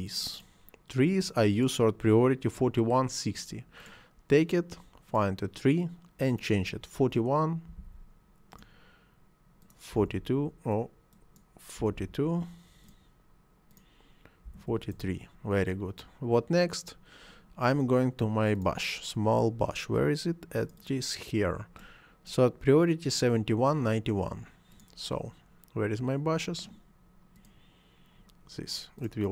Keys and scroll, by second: 7.7 4, 7.8 1, 9.9 5, 10.0 2, 11.8 4, 12.0 2, 14.5 4, 14.7 3, 14.9 Return.